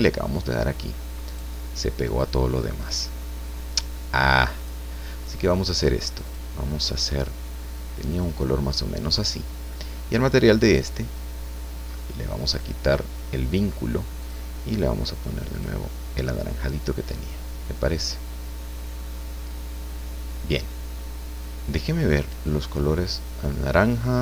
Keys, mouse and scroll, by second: 1.3 right click, 4.6 click, 6.3 click, 8.1 click, 10.7 right click, 12.5 click, 14.2 click, 15.6 click, 17.3-19.1 middle drag, 22.4 click.